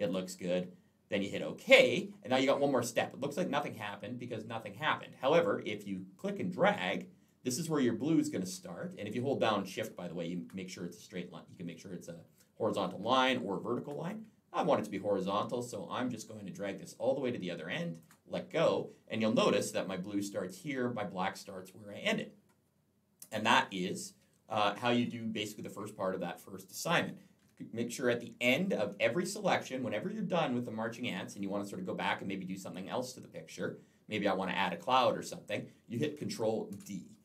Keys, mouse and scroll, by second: 1.5 click, 7.1 click, 23.3-23.8 scroll down 2, 23.8 scroll up 2, 36.6 ctrl+d.